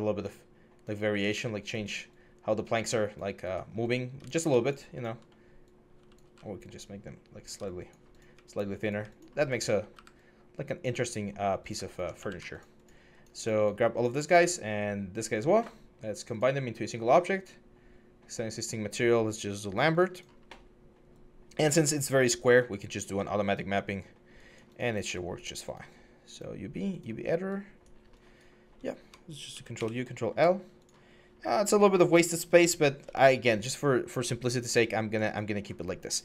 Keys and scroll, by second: 9.7 w, 12.0 q, 29.3 ctrl+u, 29.5 ctrl+l.